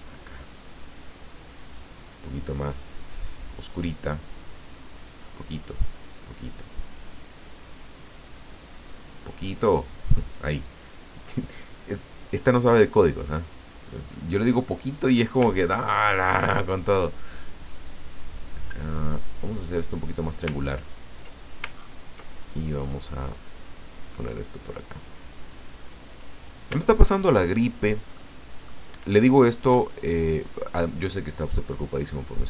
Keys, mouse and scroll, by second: 1.0 click, 4.4 click, 5.9-10.2 drag, 13.0-14.1 drag, 14.8 click, 15.8-16.5 ctrl+scroll up 4, 18.9-20.5 drag, 20.6-21.1 ctrl+scroll down 2, 21.7-22.5 ctrl+scroll up 2, 23.2-26.7 drag, 27.3 ctrl+scroll down 1, 28.1 ctrl+click, 29.2-29.5 ctrl+scroll up 1, 30.4-32.4 drag.